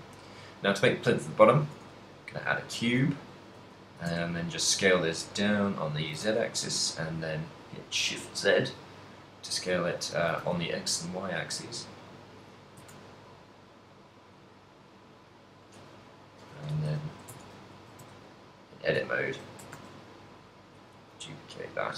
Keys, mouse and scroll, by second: 2.7 shift+middle click, 3.2 ctrl+middle click, 3.9 s, 6.0 s, 9.7 click, 10.2 s, 11.6 click, 11.8 middle click, 12.8 click, 12.8 s, 15.7 click, 16.2 middle click, 17.0 KP_1, 17.4 Tab, 18.0 shift+d, 19.2 click, 19.2 ctrl+middle click, 19.7 s, 21.1 s.